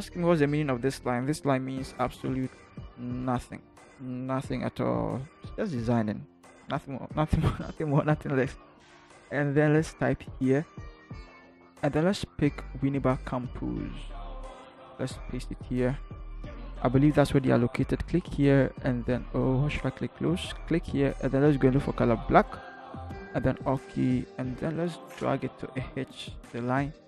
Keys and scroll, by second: 0.0 Up, 0.3 Up, 0.8 Down, 1.5 Left, 2.2 Left, 2.7 Down, 3.1 Down, 3.3 Down, 13.8 ctrl+c, 14.9 ctrl+v.